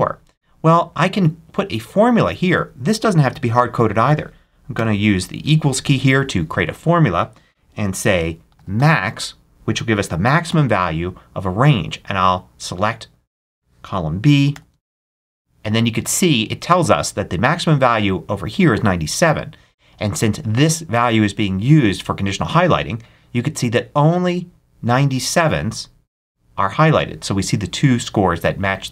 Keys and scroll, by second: 4.6 =, 8.1-9.1 typing, 10.4 shift+9, 14.4 shift+0, 15.1 shift+Return.